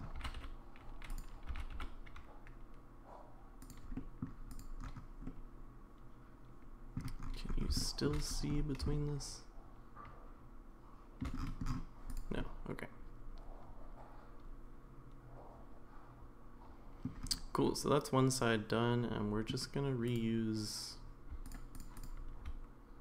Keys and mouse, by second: 0.1 g, 0.4 y, 1.1 click, 1.8 g, 3.9 middle drag, 5.2-7.0 middle drag, 7.8 shift+middle drag, 8.9-11.2 shift+middle drag, 12.4-17.0 middle drag, 17.7-19.5 middle drag, 20.1 click, 21.4 shift+click, 21.8-22.4 shift+drag.